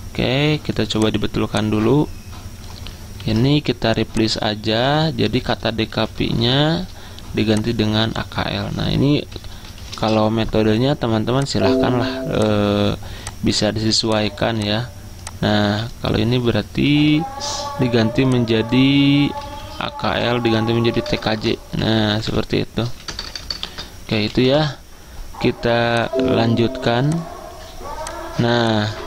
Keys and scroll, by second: 3.3 ctrl+h, 5.8-7.0 typing, 8.9 Caps_Lock, 9.2-10.4 typing, 17.0 ctrl+h, 19.3-25.1 typing, 27.4-29.0 typing.